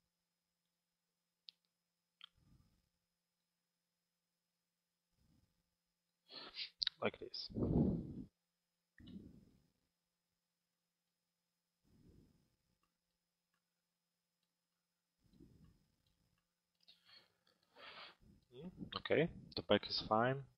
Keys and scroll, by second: 8.0 p.